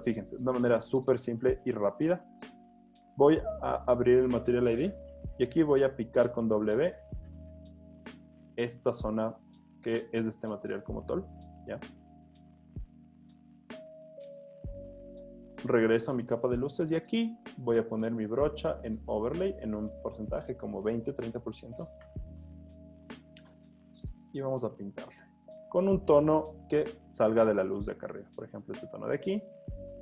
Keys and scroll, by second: 5.7 w, 16.6 b, 21.2-22.1 typing, 24.2 super+z, 27.2 i.